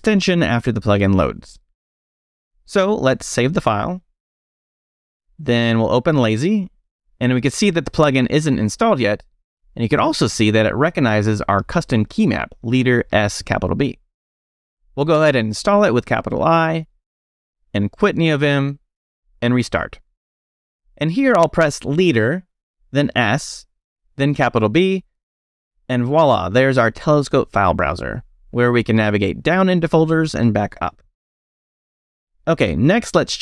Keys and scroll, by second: 3.1 Escape, 3.3 shift+;, 3.7 shift+w, 3.8 Return, 6.0 space, 6.2 l, 15.2 shift+i, 17.6-19.3 typing, 21.9 space, 22.8 s, 24.7 shift+b, 28.4 Up, 29.8 Return, 31.0 Up, 31.4 Return.